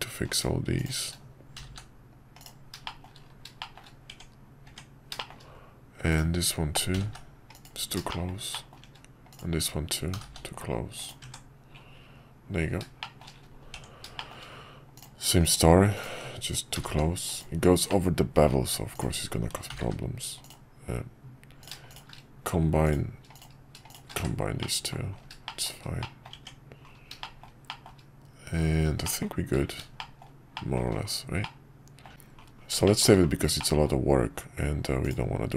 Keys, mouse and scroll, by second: 1.5 g, 2.9 middle click, 3.7 middle click, 4.1 Tab, 5.2 middle click, 6.9 g, 8.3 shift+middle click, 8.7 shift+middle click, 11.2 Tab, 13.0 shift+middle click, 14.2 shift+middle click, 14.9 click, 15.5 click, 16.7 g, 17.9 middle click, 24.6 middle click, 25.5 shift+middle click, 26.0 middle click, 26.3 Tab, 27.2 shift+middle click, 27.7 shift+middle drag, 29.0 middle drag, 30.0 shift+middle drag, 30.5 shift+middle drag, 31.4-32.1 middle drag, 32.8 shift+middle drag, 33.6 middle drag.